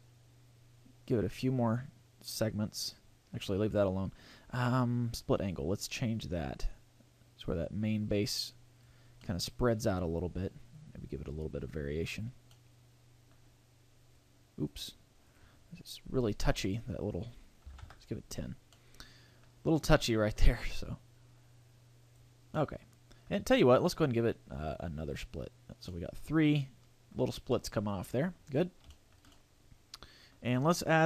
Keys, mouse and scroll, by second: 5.5 click, 9.2 middle click, 10.8 click, 12.6 middle click, 14.2 click, 15.2 click, 16.6 click, 18.7 middle click, 20.6 click, 22.6 middle click, 25.0 click, 25.9 middle click, 27.1-27.5 scroll down 5, 27.5 middle click, 28.4 scroll up 4, 28.9 shift+middle click, 29.3 middle click.